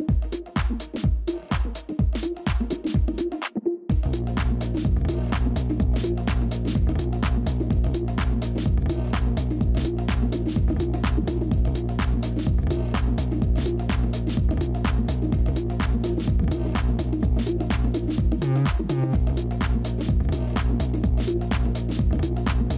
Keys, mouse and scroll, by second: 0.9 typing, 8.1 shift+click, 14.5 space, 15.8 ctrl+click, 16.9-17.6 typing, 19.2 typing, 20.8-21.6 typing.